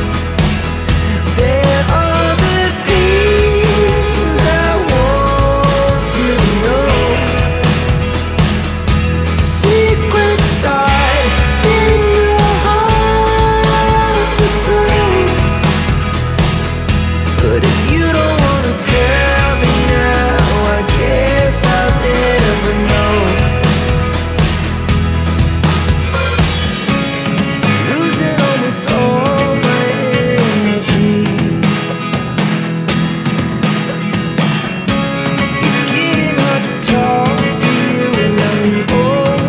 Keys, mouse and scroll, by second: 0.4 click, 4.2 click, 6.1 click, 13.2 click, 14.3 click, 16.4 click, 18.1 click, 20.4 click, 21.8 5, 23.4 click, 25.9 click, 27.6 click, 28.0 shift+click, 29.6-30.2 scroll up 1, 31.1 click, 33.2 click, 36.2 click, 37.4 click, 38.9 click.